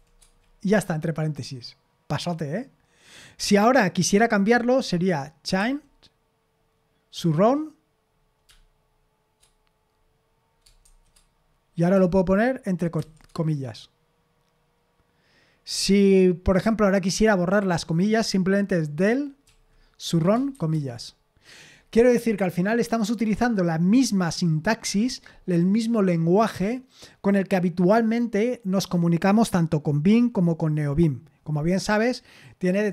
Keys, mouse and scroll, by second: 5.6 c, 7.1 s, 10.8 shift+0, 13.0 typing, 19.5-20.5 typing.